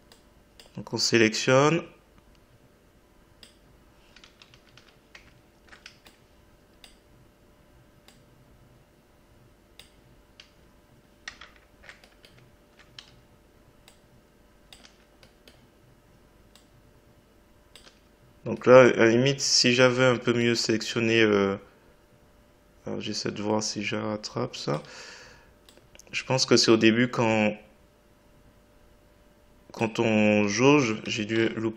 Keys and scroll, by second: 4.2 Delete, 10.3 Delete, 14.8 Delete, 17.8 Delete, 24.8 Delete, 30.4 Delete.